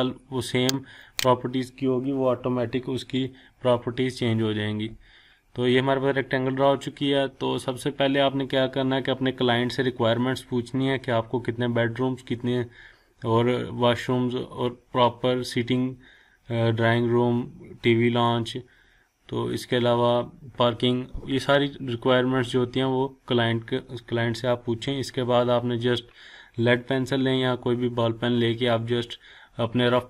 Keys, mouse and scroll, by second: 1.0 click.